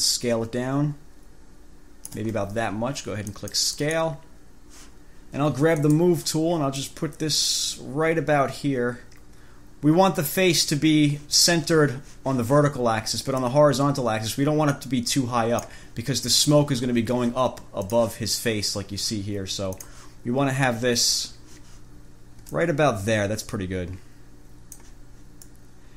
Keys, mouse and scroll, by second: 3.5 click, 5.9 click, 7.0-11.1 drag, 13.6-16.1 drag, 18.1 click, 20.0 click, 22.8 ctrl+click, 25.7 click.